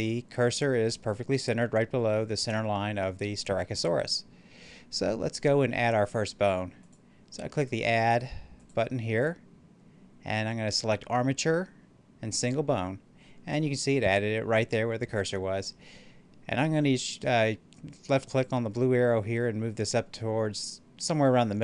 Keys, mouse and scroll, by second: 6.7 click, 8.4-9.3 typing, 12.2 click, 18.3-21.6 drag.